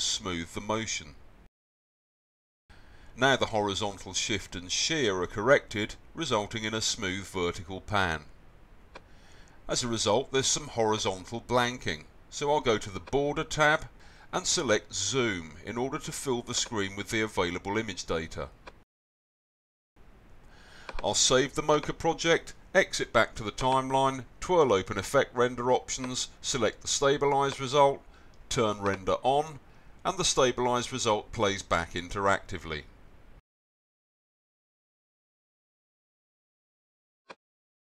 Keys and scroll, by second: 1.1 0, 1.5 Return.